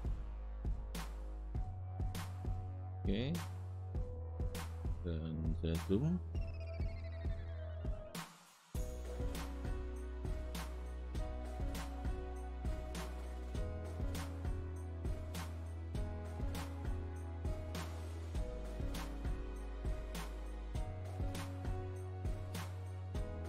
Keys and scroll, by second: 2.9 space.